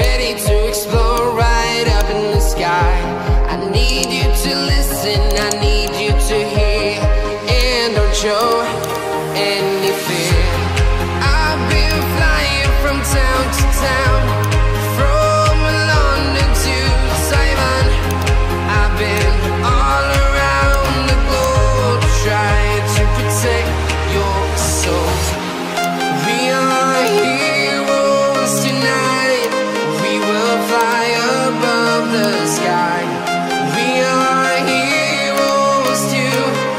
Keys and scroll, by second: 0.4 ctrl+z, 4.3 ctrl+alt+z, 4.6 ctrl+alt+z, 5.7 ctrl+z, 7.3 ctrl+z, 9.3 ctrl+z, 12.8 ctrl+z, 18.5 ctrl+z, 19.7 ctrl+z, 23.5 ctrl+alt+z, 23.5 ctrl+alt+z, 23.7 ctrl+alt+z, 27.7 ctrl+z, 29.1 ctrl+z, 30.3 ctrl+z.